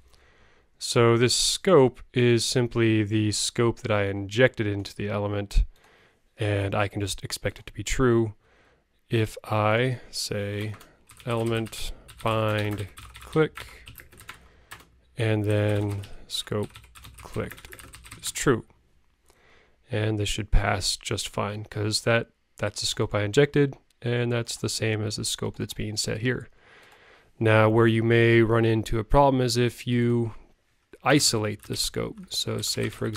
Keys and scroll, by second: 1.0 super+Right, 31.2 alt+BackSpace, 31.7 alt+Right.